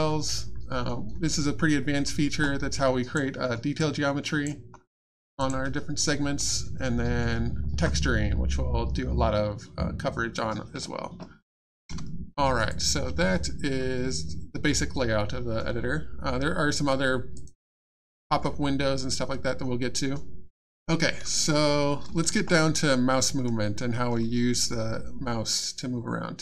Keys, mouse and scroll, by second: 2.7 click, 3.1 alt+click, 3.4-3.8 alt+scroll up 1, 3.8 alt+click, 4.7-5.1 alt+scroll up 1, 5.4 click, 6.1 middle click, 12.7 click, 17.3 click, 25.5 middle click.